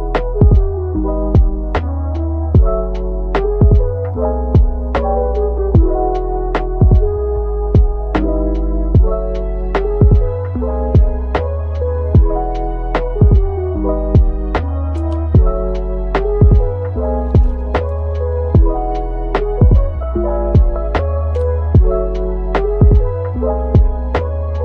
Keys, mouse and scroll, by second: 3.0 3, 3.9 alt+click, 5.2 Tab, 5.4-5.8 scroll, 5.8 middle click, 8.9-9.4 scroll up 1, 9.5 Tab, 12.1 scroll down 1, 12.3 Tab, 12.7 middle click, 14.4-14.8 scroll down 1, 14.8 middle click, 15.6 typing.